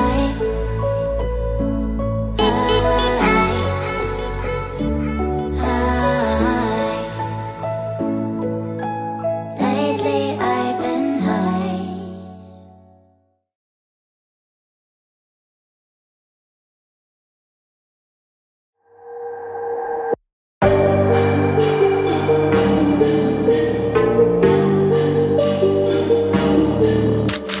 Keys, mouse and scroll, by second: 0.4 double click, 6.2 Right, 6.4 Right, 6.5 Right, 6.9 Right, 7.3 Down, 7.4 Down, 7.5 Down, 9.4 Right, 9.9 Down, 10.3 Left, 10.9 Up, 17.8 double click.